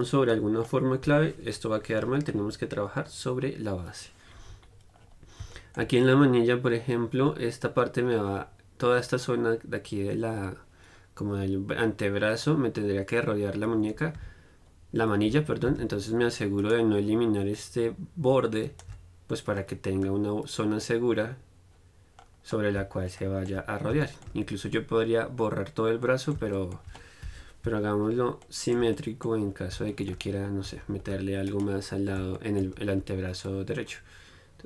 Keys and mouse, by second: 4.5-16.9 middle drag, 16.9-20.3 right drag, 20.3 middle click, 20.5 right click, 20.8-22.8 middle drag, 26.3-29.2 middle drag, 27.5 KP_1, 29.7 middle click, 30.9 z, 31.3 c, 31.9-34.4 drag, 33.2 c.